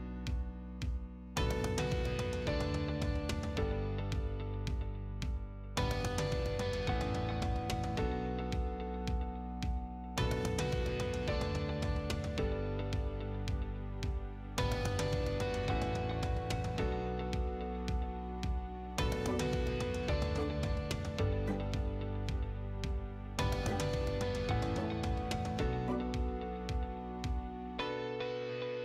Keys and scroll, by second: 2.9 Escape, 3.9-4.8 typing, 5.2 Escape, 8.9 m, 9.1 space, 11.8 t, 12.2 space.